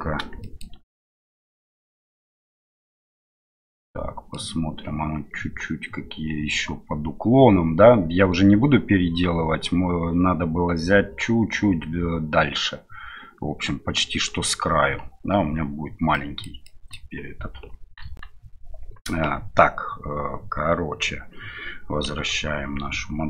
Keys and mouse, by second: 0.4 shift+middle click, 2.8 h, 3.3-4.4 middle drag, 14.7 h, 16.1 middle click, 18.0 KP_1.